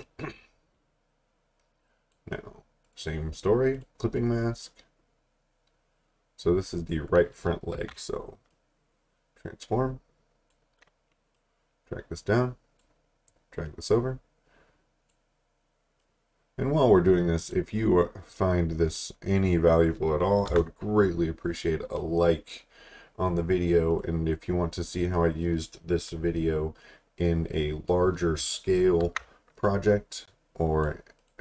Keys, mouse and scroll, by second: 2.9 right click, 3.8 click, 7.8 ctrl+t, 8.5 click, 20.5 Return, 22.6-23.9 scroll down 1, 23.9 click, 26.8 click, 29.0 ctrl+t, 29.7 click.